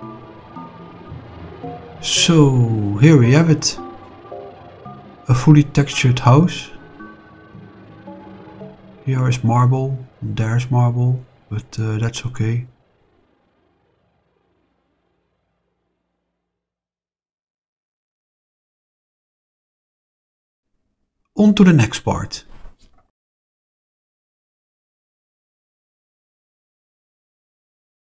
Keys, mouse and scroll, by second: 2.9-4.7 middle drag, 4.7-5.1 scroll down 2, 5.1 middle drag, 5.6-7.4 middle drag, 7.8 scroll up 2, 9.7-12.2 middle drag, 13.4-16.2 middle drag, 16.2-16.7 scroll down 2, 17.0-23.5 middle drag, 23.8-24.2 shift+middle drag, 24.4-25.1 middle drag, 26.1 click, 27.6 click.